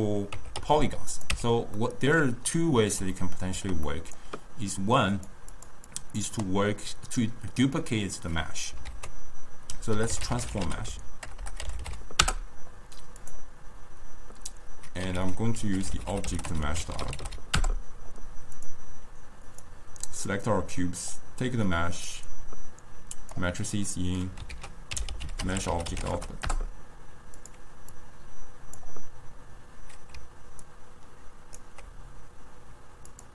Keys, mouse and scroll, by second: 0.4 Tab, 0.7 s, 1.4 Tab, 1.8-5.2 middle drag, 5.2 click, 5.6 click, 6.0-8.9 drag, 8.9 ctrl+a, 11.5 BackSpace, 15.2 ctrl+a, 19.5-22.3 drag, 24.0 middle click, 24.6 ctrl+a, 28.0 drag, 30.7 ctrl+right click.